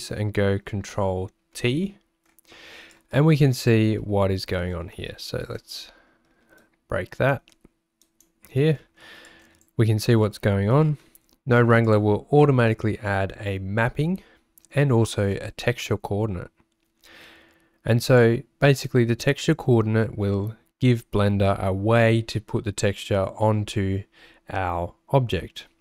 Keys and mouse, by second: 1.8 ctrl+t, 2.9 click, 4.0 f, 6.7 click, 9.3 click, 10.7 g, 18.0 click.